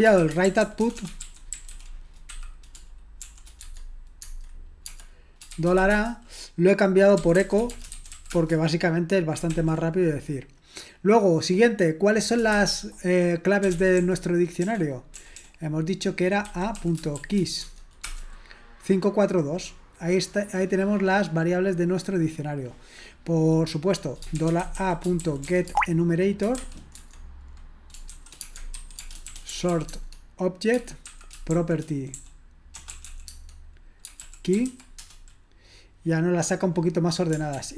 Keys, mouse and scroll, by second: 0.0-8.6 typing, 9.5 ctrl+l, 13.5-15.2 typing, 16.9-17.7 typing, 18.0 Return, 25.2-35.0 typing, 25.7 Tab, 37.6 ctrl+p.